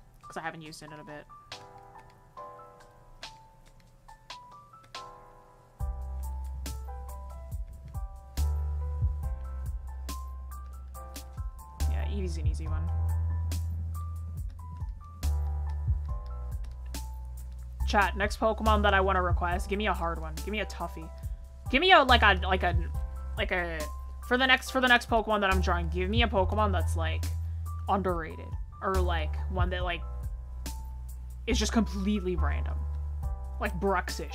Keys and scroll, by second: 2.5 ctrl+z.